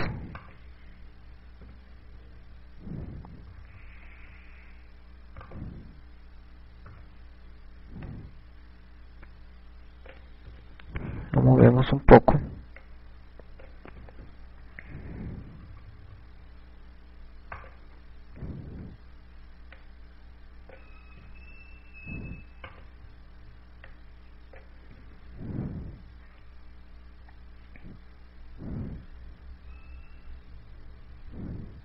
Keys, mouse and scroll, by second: 0.1 right click, 0.7 i, 1.8 right click, 3.0 i, 5.0 KP_6, 5.2 KP_6, 7.1 right click, 7.6 KP_1, 9.7 click, 13.2 right click, 14.5 click, 15.6 i, 16.7 KP_6, 17.4 KP_6, 17.5 KP_6, 17.6 KP_6, 19.1 right click, 19.8 KP_1, 21.4 click, 22.6 i, 24.3 right click, 25.6 click, 26.9 i.